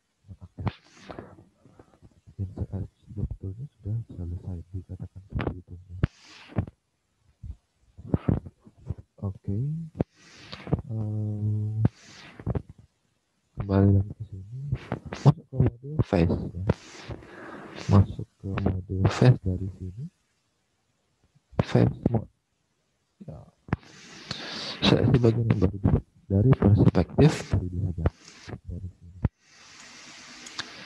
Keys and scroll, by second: 10.4 alt+Tab, 11.6 alt+Tab, 18.1 alt+Tab, 23.6 alt+Tab, 25.8 alt+Tab, 26.3 space, 28.2 space.